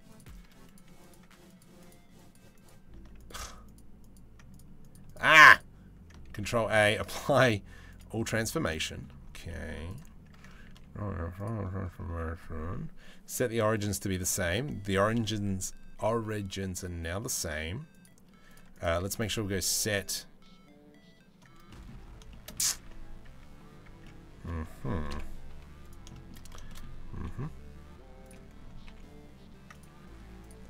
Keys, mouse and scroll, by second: 0.3 click, 1.4 right click, 1.8 right click, 2.1 right click, 2.8 right click, 3.2 click, 3.6 click, 4.1 click, 4.5 click, 5.9 ctrl+a, 8.3-8.6 middle drag, 8.8 scroll down 1, 9.1 middle click, 10.3 ctrl+a, 14.2-14.6 middle drag, 16.9 click, 17.5 click, 18.1 click, 18.3 click, 18.8 ctrl+a, 21.3 middle drag, 22.0 middle click, 22.2 Tab, 22.9 Tab, 23.6 Tab, 23.6 middle click, 24.7 KP_7, 25.1 z, 25.7 shift+middle click, 26.3 shift+middle click, 26.7 r, 28.5 g, 29.6 r.